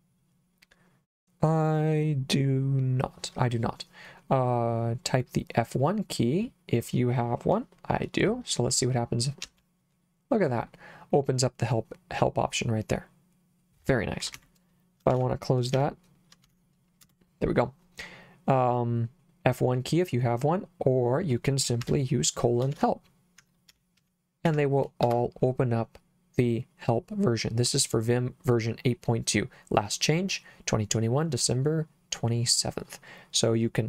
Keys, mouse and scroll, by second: 9.5 F1, 14.3 Escape, 15.1 shift+;, 15.8 q, 16.5 shift+1, 17.1 Return, 21.9 Escape, 22.8-25.0 typing, 25.1 Return.